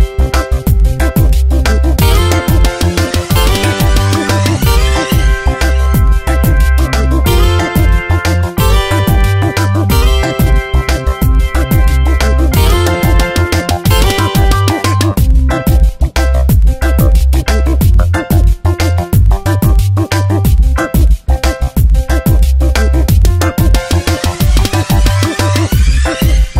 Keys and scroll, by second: 0.8 ctrl+shift+i, 1.3 Delete, 1.9 ctrl+d, 2.6 v, 6.6 ctrl+t, 9.1 Return, 11.3 ctrl+z, 17.2 ctrl+t, 18.2 ctrl+z, 18.5 Return, 19.1 ctrl+e, 20.6 ctrl+z, 24.6 ctrl+z.